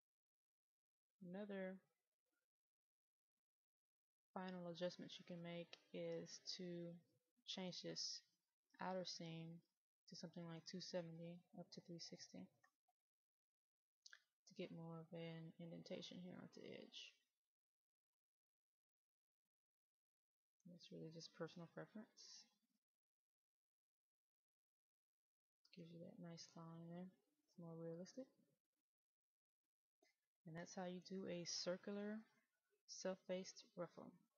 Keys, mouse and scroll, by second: 12.1 KP_2, 14.8-16.0 scroll down 1, 16.0 right click, 18.0-19.2 middle drag, 20.3 click.